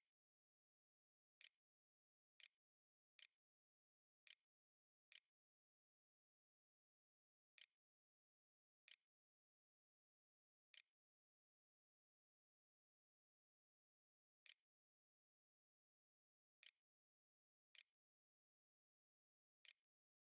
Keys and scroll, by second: 0.0-7.1 typing, 8.4-11.5 typing, 12.9-20.2 typing, 14.1 Return.